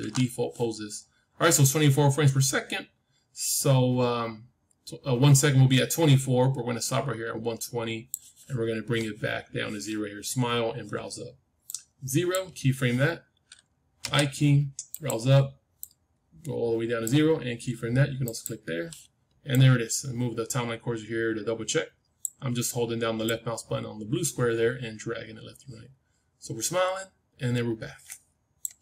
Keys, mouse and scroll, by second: 1.5-3.5 drag, 11.6-13.9 drag, 13.9 i, 14.9-18.1 drag, 18.9-21.5 drag, 23.1-25.2 drag.